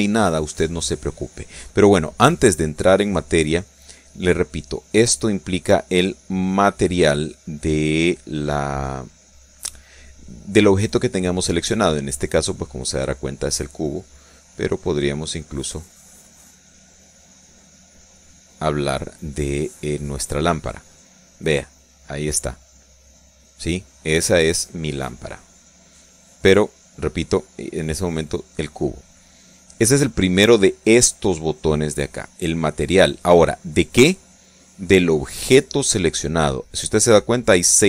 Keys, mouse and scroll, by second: 5.3-6.3 drag, 15.0 right click, 18.4 click, 21.8-22.8 middle drag, 24.5 click, 25.2 right click, 27.6 right click.